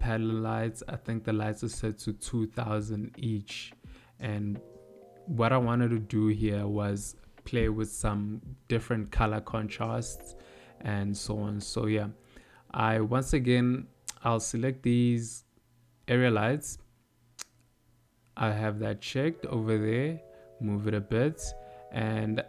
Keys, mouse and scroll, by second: 1.1 click, 2.0 shift+click, 4.0 a, 4.6 x, 11.9 click, 12.4 click, 12.5 click, 13.1 click, 13.5 click, 14.1 click, 15.3-16.1 shift+click, 19.0 click.